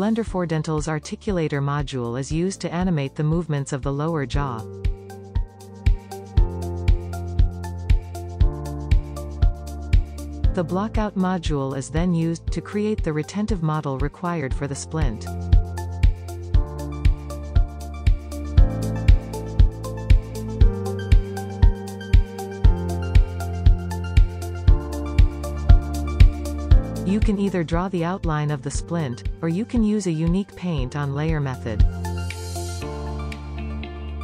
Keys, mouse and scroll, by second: 2.6-4.4 drag, 4.4 scroll down 4, 5.0 middle click, 5.4 click, 6.1-7.0 drag, 7.6-9.6 drag, 9.6 click, 10.3-11.3 drag, 11.4 middle click, 11.7 click, 11.8-12.8 shift+middle drag, 12.8 click, 13.6-14.0 drag, 14.2 click, 14.6 click, 15.1-16.7 drag, 16.7-17.8 middle drag, 17.8 scroll up 1, 17.9-18.8 drag, 19.0-20.0 middle drag, 20.0 scroll down 3, 20.1-20.8 middle drag, 20.8 scroll down 1, 20.9-21.4 drag, 22.4 click, 23.0 shift+middle click, 23.8-24.6 middle drag, 24.8 shift+right click, 25.2-25.7 shift+middle drag, 25.7-26.0 drag, 26.7-29.4 typing, 27.2 middle click, 28.2 shift+middle click, 28.8 scroll up 1, 29.6 middle click, 29.7 click, 29.9 click, 31.3 click, 31.8 scroll down 2, 32.7-33.4 middle drag.